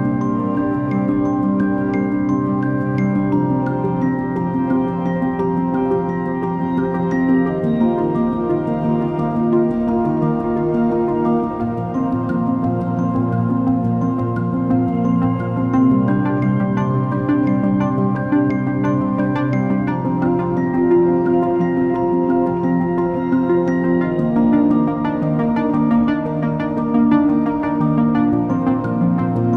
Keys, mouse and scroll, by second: 23.3 alt+shift+click, 28.6 alt+click.